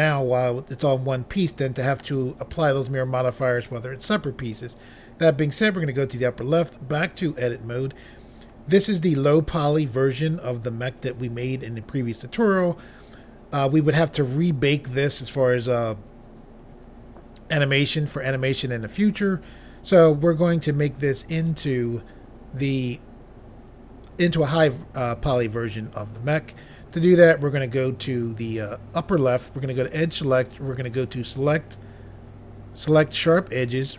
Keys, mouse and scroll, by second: 5.6 click, 6.6 click, 6.7 click, 29.3 click, 31.0 click, 33.1 click.